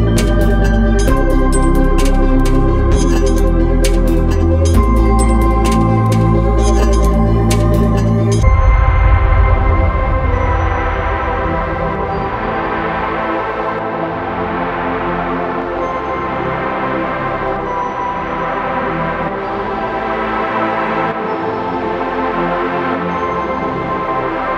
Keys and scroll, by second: 23.5 ctrl+alt+z.